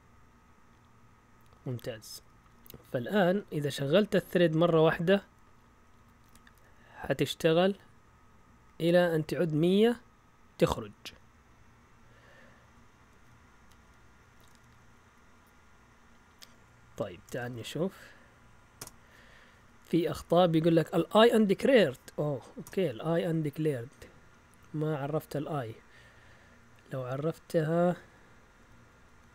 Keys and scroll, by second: 1.5 Up, 1.7-3.7 typing, 2.8 Up, 5.9-7.3 typing, 11.9 Down, 12.5-15.2 typing, 17.1 Escape, 17.1-18.1 typing, 18.7 Return, 22.6 Return, 24.3 Up, 25.0 Up, 25.2 Up, 27.6 Up, 27.7 Up, 27.9 Up, 28.1 Up, 28.4-29.3 typing.